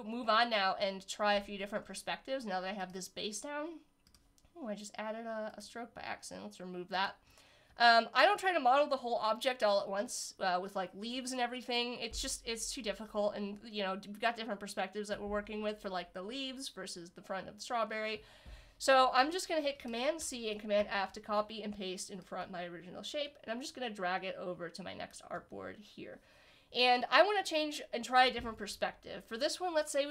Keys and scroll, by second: 20.2 super+c, 20.8 super+f.